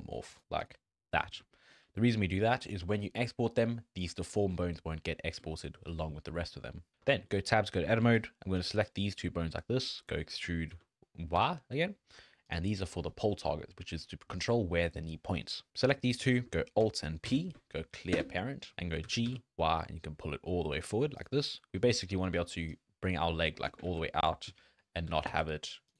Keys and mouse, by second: 1.1 middle drag, 1.5 shift+drag, 1.9 drag, 2.5 click, 2.6-5.5 drag, 6.4 shift+click, 6.8 click, 7.0 Tab, 7.3 click, 7.9 alt+a, 8.3 click, 9.9 click, 10.2 e, 17.3 alt+p, 19.0 g, 21.9 shift+click, 22.4 d, 22.7-23.7 drag, 23.9 ctrl+z, 25.1 g.